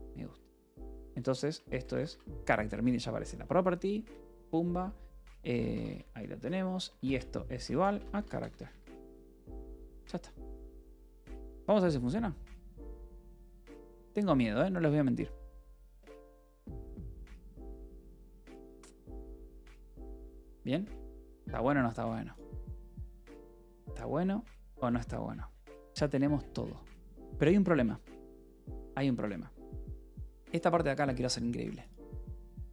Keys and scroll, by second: 0.0-2.9 typing, 4.0 Return, 5.3 Escape, 5.5-8.8 typing, 9.5 ctrl+s, 11.2-13.4 typing, 13.7 Return.